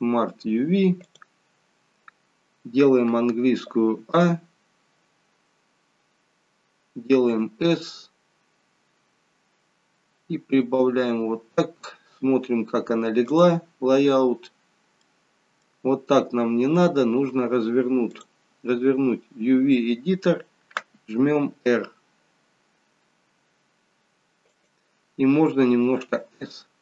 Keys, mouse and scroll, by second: 13.5 click, 14.3-14.7 scroll up 1, 15.0 middle click, 15.0-16.1 scroll up 3.